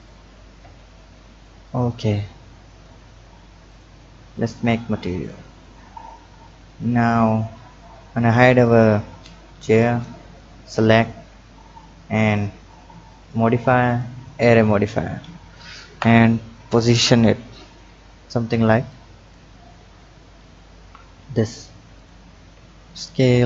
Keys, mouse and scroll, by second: 0.0 click, 0.6 Tab, 1.6 click, 3.7 drag, 4.3 click, 5.2 click, 7.8 click, 8.6 click, 10.0 click, 12.2 drag, 13.1-15.8 drag, 15.8 KP_1, 17.1 KP_3, 17.9-18.9 scroll up 1, 18.9 click, 19.5-20.7 scroll up 6, 20.7 g, 22.5 s.